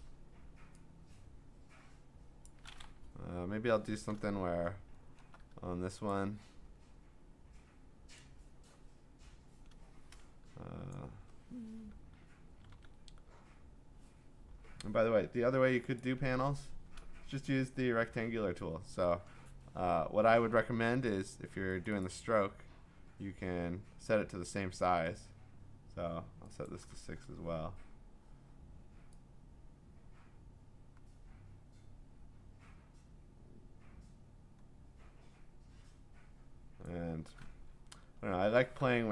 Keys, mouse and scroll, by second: 2.4 click, 4.1-5.5 scroll, 6.1 click, 10.9 click, 12.7 ctrl+d, 16.0 click, 21.8 click, 22.2 click, 26.7 click, 27.2 6, 36.8 click, 38.2 scroll, 38.2 click.